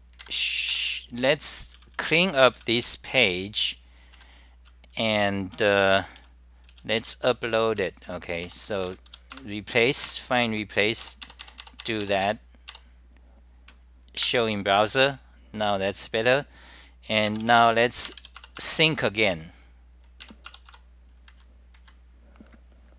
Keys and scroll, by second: 0.6-1.3 typing, 0.8 scroll down 8, 3.2 r, 3.3 scroll down 8, 5.3-8.4 typing, 8.8 Home, 9.4 Return, 10.2 Return, 14.2 super+r, 18.2-18.9 typing.